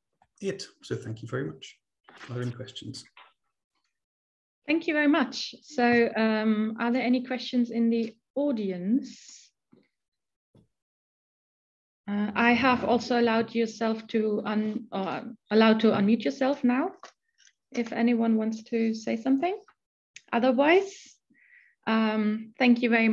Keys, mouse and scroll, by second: 0.5 click, 1.1 Right.